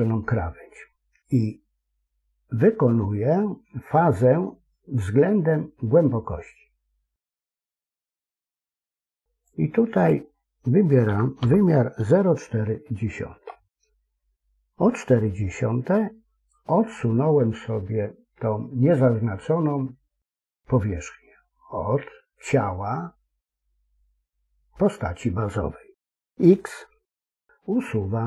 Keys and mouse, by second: 6.3-9.5 drag, 10.0-14.1 drag, 27.1 x.